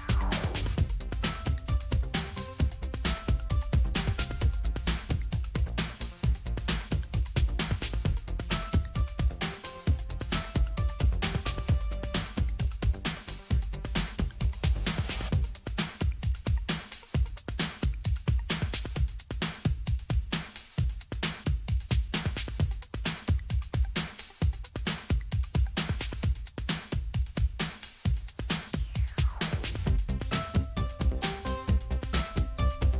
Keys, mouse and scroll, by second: 1.8 click, 2.9-4.8 drag, 5.2 click, 7.2 click, 15.4 click, 18.7-19.6 ctrl+scroll up 1, 20.1-20.6 ctrl+scroll up 2, 20.8-21.3 ctrl+scroll down 2, 23.9 click, 24.8 click, 26.9 right click, 28.8 click, 32.2 click.